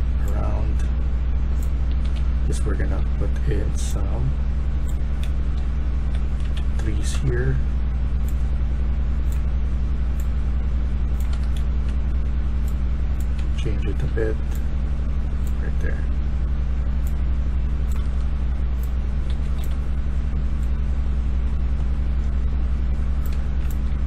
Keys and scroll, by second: 1.6-3.4 typing, 4.9-7.0 typing, 11.0-11.7 typing, 13.0-13.8 typing, 17.9-19.5 typing, 23.0-23.8 typing.